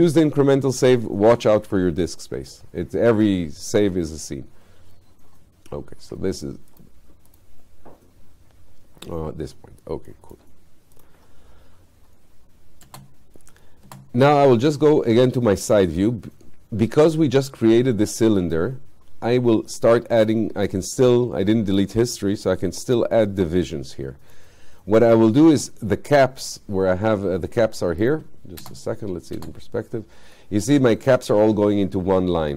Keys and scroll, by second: 28.7 space.